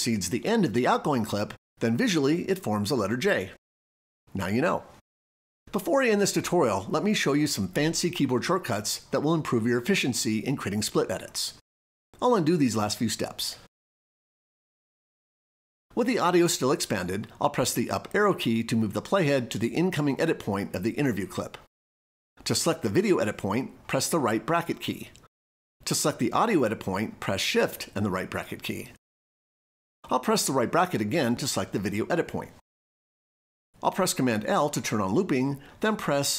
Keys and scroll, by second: 17.7 Up, 24.2 ], 27.3 shift+], 33.8 super+l.